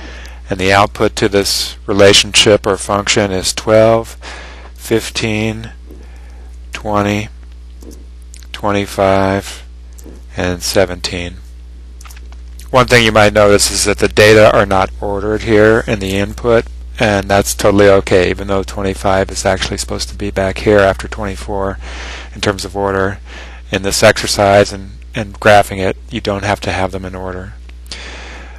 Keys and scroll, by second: 0.7 1, 1.1 2, 1.6 Return, 4.3 1, 5.0 5, 5.4 Return, 6.6 2, 7.0 0, 7.8 Return, 8.6 2, 9.0 5, 10.1 Return, 10.7 1, 11.3 7, 12.0 Return.